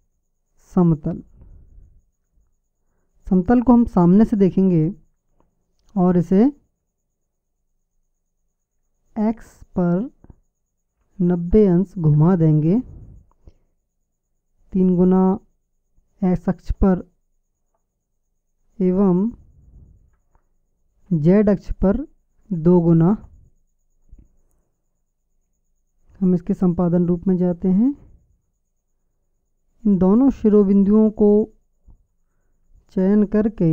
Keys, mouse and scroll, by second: 2.1 KP_1, 4.2 KP_1, 5.8 r, 13.5 s, 20.5 s, 27.1 Tab, 28.8-30.6 right drag.